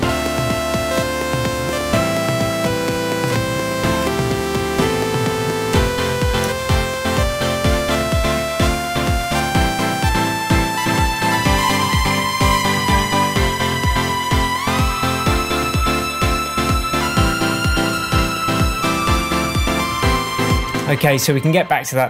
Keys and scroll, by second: 20.6 space.